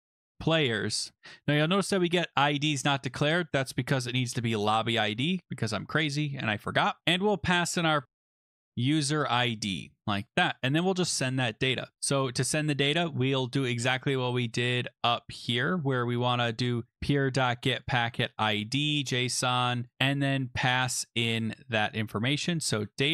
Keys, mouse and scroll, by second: 0.0-0.5 typing, 3.2 click, 3.3 click, 4.0 ctrl+c, 4.8 click, 4.9 click, 5.1 ctrl+v, 5.4 ctrl+click, 5.6 ctrl+v, 6.1 scroll down 3, 7.0 click, 7.0-9.3 typing, 10.3 click, 10.6 click, 11.7 Return, 11.8-12.5 typing, 16.5 click, 16.9 ctrl+c, 17.9 click, 18.0 ctrl+v, 20.9 click, 22.4-23.1 typing.